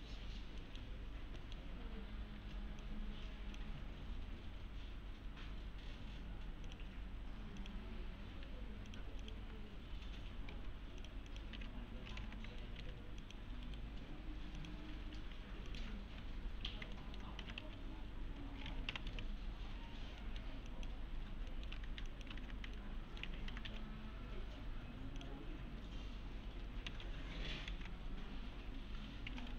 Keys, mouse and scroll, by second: 1.1 scroll down 1, 1.4 middle click, 1.9-2.4 scroll up 1, 2.8-3.8 click, 6.7 click, 8.4-10.2 typing, 8.9 click, 11.0 click, 11.6 alt+q, 12.2 alt+x, 12.4 scroll down 1, 12.6 alt+middle click, 12.9 3, 13.2 click, 13.7 right click, 14.6 click, 14.7-15.7 typing, 15.7 click, 17.0 alt+middle click, 17.2-19.6 typing, 17.9-18.3 scroll down 1, 18.3-18.9 scroll up 1, 19.4 scroll down 1, 19.7 scroll up 1, 20.2 middle click, 20.7 click, 21.2 scroll down 1, 21.5 middle click, 21.9 ctrl+shift+e, 22.1 click, 22.4 ctrl+shift+e, 22.8-23.4 alt+shift+middle click, 23.0-24.2 typing, 24.0 scroll down 1, 25.2 click, 25.7-26.5 scroll down 1, 26.5 scroll up 1, 26.9 alt+x, 27.7 alt+x, 29.0-29.5 typing.